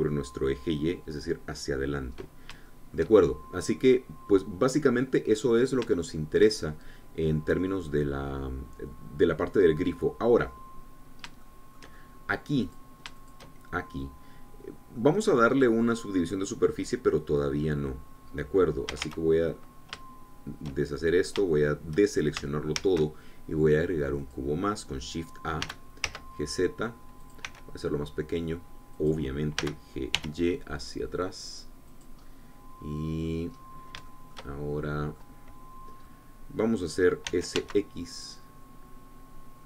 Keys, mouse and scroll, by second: 0.0-1.2 scroll down 2, 3.4-6.7 shift+drag, 6.8 shift+click, 7.4-8.0 shift+scroll up 1, 8.0-9.7 scroll down 1, 9.7-10.3 scroll down 1, 10.3-12.0 drag, 12.2-13.2 shift+drag, 13.5 shift+click, 14.1 shift+click, 15.5 scroll down 2, 15.7 click, 19.7 a, 21.6-22.3 shift+scroll down 2, 22.3 shift+click, 23.5 shift+a, 25.0 click, 26.4 g, 26.8 z, 28.0 click, 28.2 s, 29.7 click, 30.4 g, 30.9 y, 32.7 click, 33.0-34.2 middle drag, 34.3-34.7 scroll up 1, 34.8-36.1 shift+middle drag, 36.8-38.0 middle drag, 38.0 s, 38.3 x.